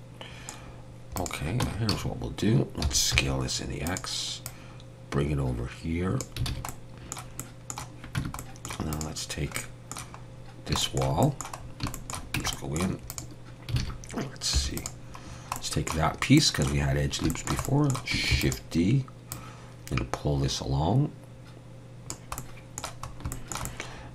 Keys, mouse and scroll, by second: 0.7-1.3 scroll down 2, 1.2 click, 1.6 Tab, 1.9 a, 2.8 s, 4.5 click, 6.5 alt+a, 6.7 middle click, 7.4 middle click, 8.2 Tab, 8.4 middle click, 8.9 click, 9.6 middle click, 10.3 scroll down 2, 10.8 shift+middle click, 11.2 middle click, 11.6 scroll down 2, 11.9 shift+middle click, 12.4 Tab, 12.5 middle click, 13.1 click, 13.8 alt+a, 14.6 3, 14.8 click, 15.6 middle click, 16.1 scroll up 2, 16.4 middle click, 17.3 shift+middle click, 17.7 middle click, 18.3 shift+d, 19.3 click, 22.4 middle click, 23.1 scroll up 2, 23.3 shift+middle click, 23.7 middle click.